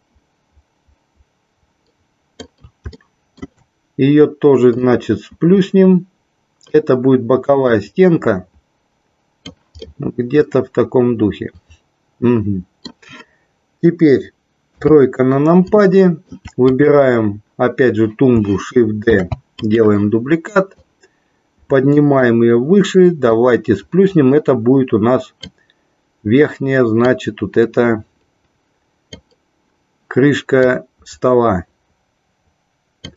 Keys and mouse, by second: 3.1 shift+middle click, 4.8-6.8 drag, 7.8-9.7 drag, 10.1-13.2 middle drag, 14.8 KP_3, 16.1 middle click, 16.8 click, 19.8 click, 20.9-22.3 drag, 23.6-25.6 drag, 27.1-29.3 drag, 30.8-33.1 drag.